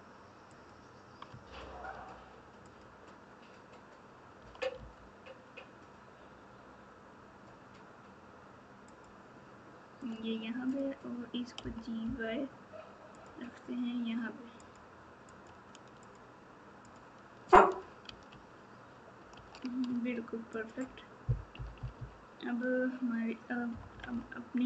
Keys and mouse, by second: 1.2 Tab, 2.6 click, 4.4 g, 10.0 click, 11.6 g, 15.2 click, 16.0 click, 16.8 click, 18.0 alt+z, 19.3 alt+z, 19.8 Tab, 20.5 click, 21.5 KP_4, 21.9 KP_4, 23.7 KP_Subtract.